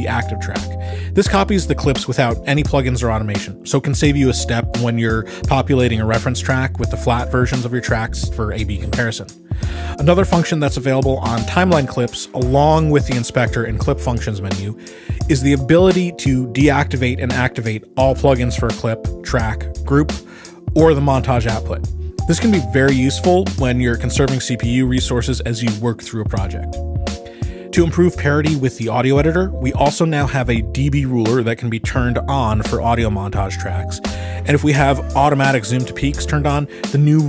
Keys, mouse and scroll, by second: 0.7 click, 2.4-4.4 ctrl+scroll, 10.7 click, 13.7 click, 14.7 click, 17.0 click, 19.7 click, 21.1 click, 22.3 click, 24.1 Escape, 25.4 click, 26.6 click, 32.8 click, 34.2 click, 34.8 click, 36.1-36.6 ctrl+scroll, 36.8 ctrl+s.